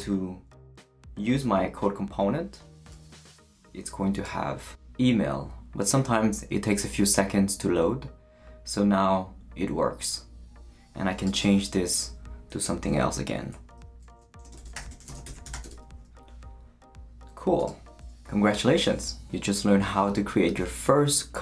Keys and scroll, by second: 14.3-16.0 typing.